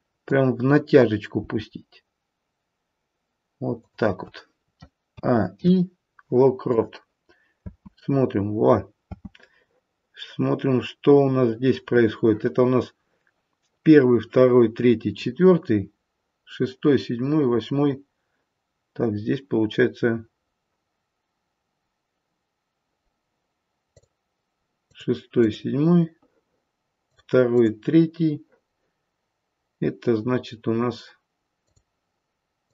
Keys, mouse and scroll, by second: 0.1 click, 1.8 g, 5.1 a, 5.5 i, 7.6 space, 9.0 space, 23.8 click, 24.8 click, 27.1 click, 27.6 click, 31.5 click, 32.6 click.